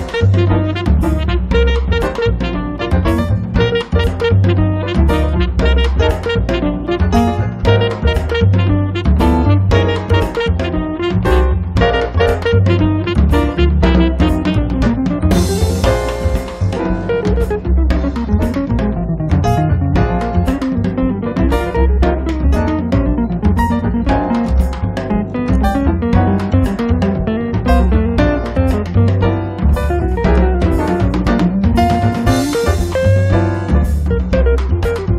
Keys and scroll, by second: 33.2 1, 33.5 0.